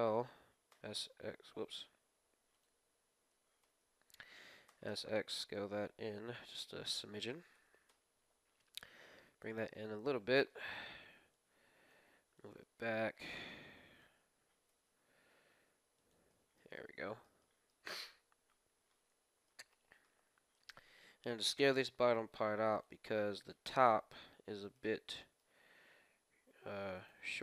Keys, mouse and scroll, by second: 2.6 ctrl+l, 2.6 ctrl+s, 2.6 ctrl+x, 2.6-4.4 drag, 4.6 s, 7.5 g, 9.7-12.1 middle drag, 11.4-15.2 drag, 14.6 g, 16.2-21.9 middle drag, 18.2 KP_1, 19.3 scroll up 1, 20.5-22.3 right drag, 21.3 s, 23.1-26.9 middle drag, 24.6-26.4 right drag, 25.7 s, 27.2 middle click.